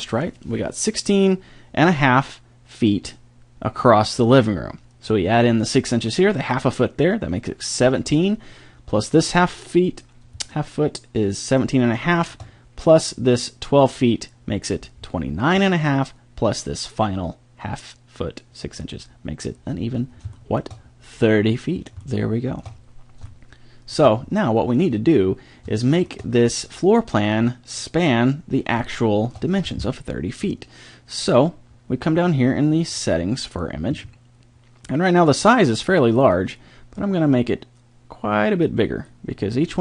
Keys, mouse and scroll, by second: 10.5-10.9 middle drag, 11.2-13.4 middle drag, 20.4 middle click, 22.4 middle click, 23.3-24.3 middle drag, 25.0 middle click, 35.3-36.9 drag.